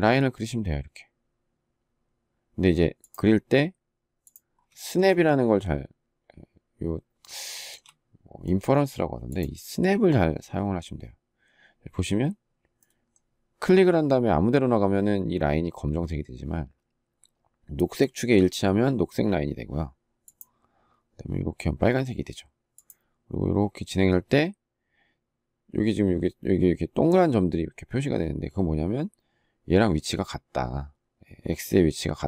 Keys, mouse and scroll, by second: 4.6 shift+middle click, 7.3 shift+middle click.